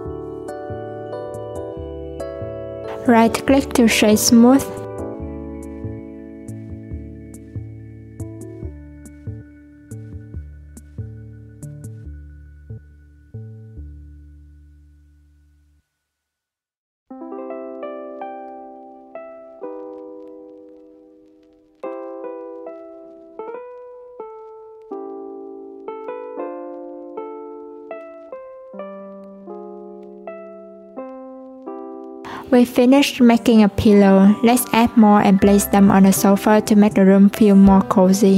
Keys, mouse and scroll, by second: 1.1 Tab, 2.1 alt+z, 2.6-3.2 middle drag, 3.2 scroll up 1, 3.4 right click, 4.6 click, 5.6 /, 6.4 click, 7.4 click, 8.7 r, 12.3 click, 14.2 click, 16.9 s, 21.9-23.4 drag, 23.4 s, 28.3 s, 30.3 ctrl+a, 31.5-33.4 drag, 34.0-34.6 scroll down 1, 34.6 scroll up 1, 35.3 click.